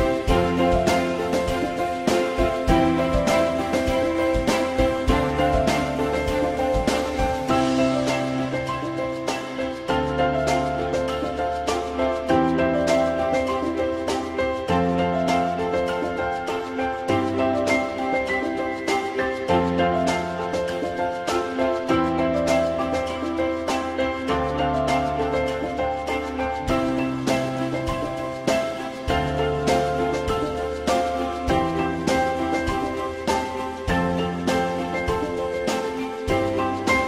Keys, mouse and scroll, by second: 0.3-2.1 drag, 8.1 click, 10.7 shift+click, 14.2 alt+middle click, 14.4 alt+middle click, 15.8 F2, 19.5 e, 20.8 click, 22.2 alt+middle click, 22.8 alt+middle click, 28.9 alt+middle click, 30.9 alt+middle click, 36.1 alt+middle click.